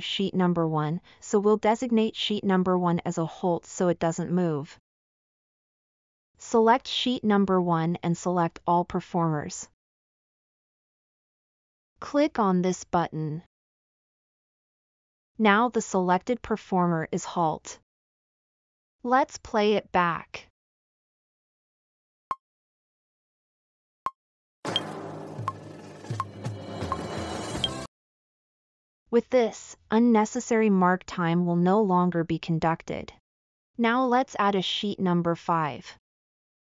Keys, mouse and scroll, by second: 1.8-2.9 scroll up 1, 2.9 scroll up 1, 17.9 middle click, 19.3-20.2 middle drag, 35.1-36.6 scroll up 8.